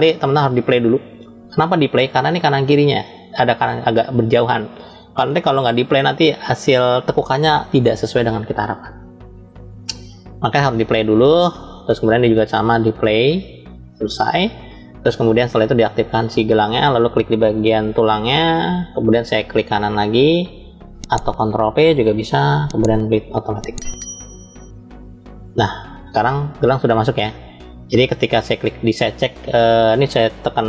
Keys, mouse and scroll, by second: 0.7 click, 10.0-11.0 drag, 12.5-13.5 drag, 14.7 click, 15.6 click, 17.9 shift+click, 22.1 ctrl+p, 27.3 click, 28.3 click.